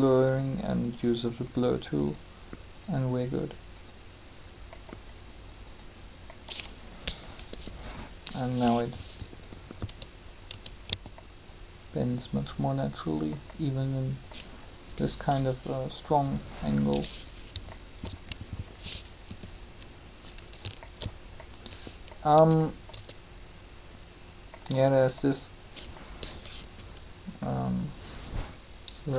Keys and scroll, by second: 7.4 3, 9.8 Tab, 10.7 a, 15.7 3, 19.3 r, 22.3 Tab, 26.5 3.